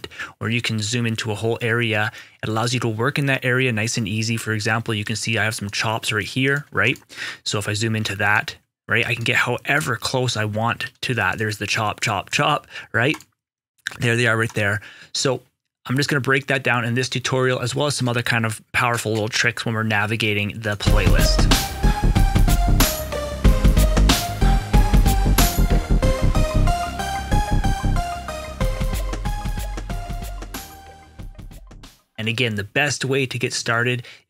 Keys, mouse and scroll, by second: 5.6 ctrl+shift+click, 6.8 right click, 7.7 ctrl+right click, 10.7 ctrl+scroll down 1, 11.2 ctrl+shift+click, 13.0 ctrl+right click, 20.5 right click, 20.6 click.